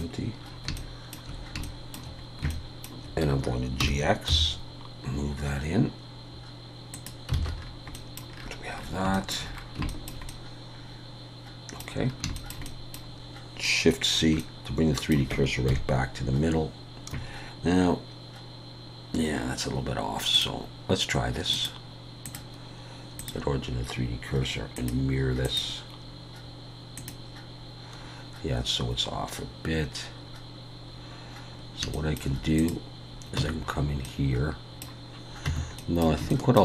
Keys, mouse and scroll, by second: 0.5 scroll up 4, 0.8 shift+middle click, 1.6 shift+middle click, 2.2-2.5 scroll up 2, 2.5 shift+middle click, 3.8 g, 7.4 alt+a, 7.5 scroll down 4, 7.9 middle click, 8.3 scroll down 1, 8.9 scroll down 4, 9.0 shift+scroll up 1, 9.1 shift+middle click, 9.5 scroll down 1, 9.9 shift+middle click, 10.3 middle click, 12.0 scroll down 2, 12.4 shift+middle click, 12.7 middle click, 13.0 scroll up 1, 14.1-14.6 scroll up 4, 14.1 shift+c, 14.4 middle click, 15.7 KP_1, 17.2 scroll up 3, 17.9-18.2 scroll up 2, 19.2-19.6 scroll down 4, 20.4 click, 21.5 click, 24.8 click, 27.1 click, 30.2 scroll up 2, 30.9-31.5 scroll down 1, 31.5 scroll down 2, 31.9 shift+middle click, 32.6 click, 33.4 Tab, 33.7-34.0 scroll up 3, 34.0 middle click, 35.5 Tab, 35.8 middle click, 36.3 shift+middle click.